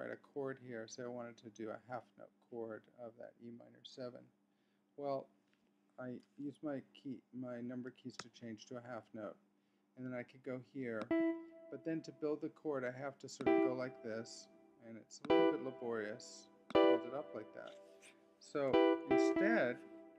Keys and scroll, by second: 9.1 6.